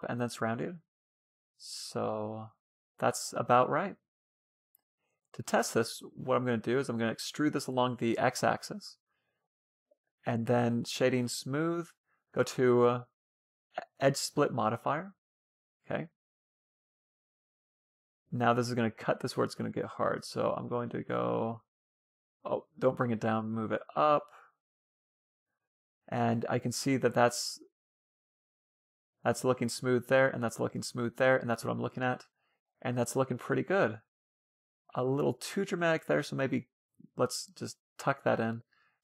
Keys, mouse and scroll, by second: 0.6-2.4 middle drag, 4.0 a, 5.1-6.2 middle drag, 6.0 e, 7.9 a, 8.1 a, 8.2-9.9 middle drag, 10.3-13.3 drag, 14.6-15.4 scroll up 1, 15.4 Tab, 15.4 scroll up 1, 15.7-19.2 middle drag, 19.4-20.9 drag, 24.3-25.8 middle drag, 26.1-29.0 middle drag, 29.0 scroll up 1, 29.3-29.7 scroll down 1, 30.6-32.3 middle drag, 34.2-35.9 middle drag, 36.6 Tab, 36.7 Tab, 37.6 Tab, 38.1 a, 38.2 b.